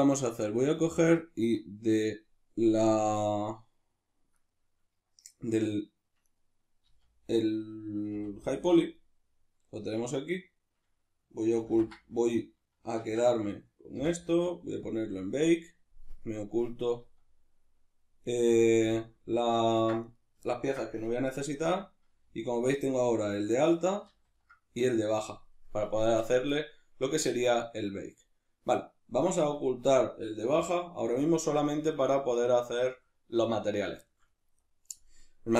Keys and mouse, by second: 1.5 click, 4.4 right click, 6.2 right click, 6.8 z, 11.7 ctrl+i, 13.9 m, 16.2 click, 17.0 z, 18.3 right click, 18.9 z, 20.1 right click, 20.5-29.5 ctrl+middle drag, 21.6 h, 24.1 ctrl+z, 29.5 right click, 30.5 h, 31.0 right click, 31.7-35.5 shift+middle drag.